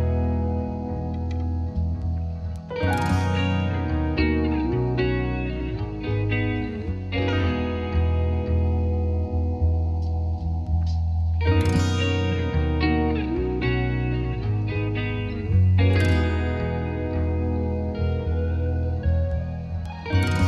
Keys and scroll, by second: 18.5-19.4 typing, 19.8 Return.